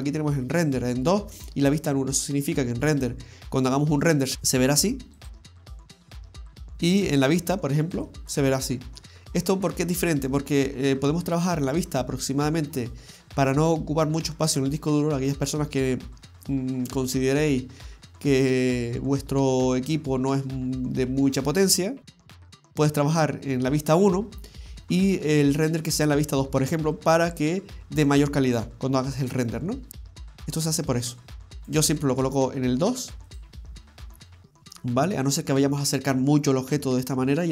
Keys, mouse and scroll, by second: 4.3 click, 5.2 click, 8.0 click, 11.9 scroll down 1, 12.2 middle click, 16.1-16.7 scroll up 3, 17.0 scroll down 2, 31.6 click, 31.7 click, 33.3 click, 34.3-34.9 scroll up 2, 34.9 scroll up 2, 35.5-35.9 scroll up 3, 36.3 middle click.